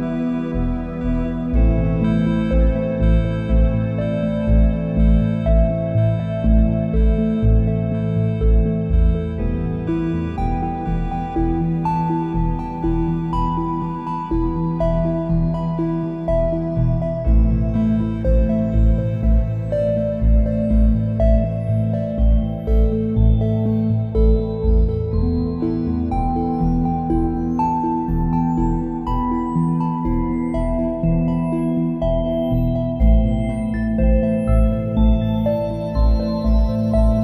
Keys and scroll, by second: 16.5 ctrl+shift+a, 16.7 space, 17.8 a, 25.4 space, 30.9 space, 33.5 `, 33.7 space.